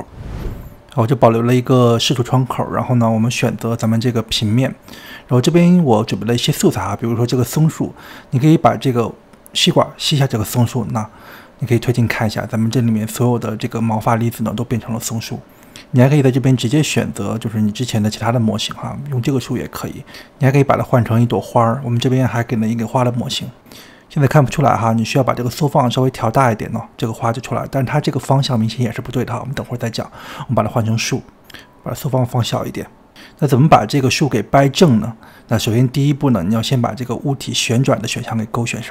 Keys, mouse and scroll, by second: 0.9 scroll down 1, 2.8-4.3 scroll down 10, 4.3 click, 5.0 g, 6.6 click, 9.2 click, 10.8 click, 11.8 click, 13.0-14.2 scroll up 17, 15.9-22.3 drag, 22.3 shift+middle click, 22.5-22.9 scroll down 2, 22.9 shift+middle click, 23.6-33.2 drag, 33.2-38.9 shift+middle drag.